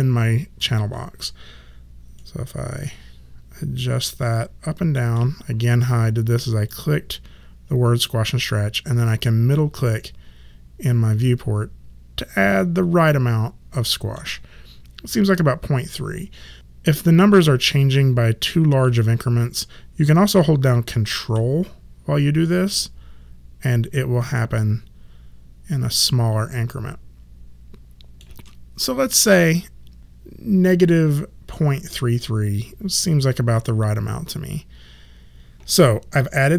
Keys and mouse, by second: 2.1 middle click, 6.6 click, 9.2 middle click, 22.4 ctrl+middle click.